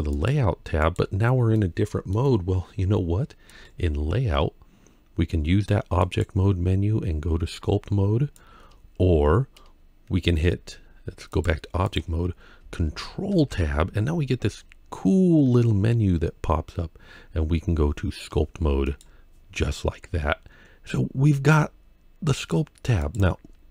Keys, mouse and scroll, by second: 0.0 shift+middle click, 0.0 click, 3.3 click, 3.3 middle click, 5.8-8.3 drag, 11.1-11.8 drag, 13.1 ctrl+Tab, 22.9 click.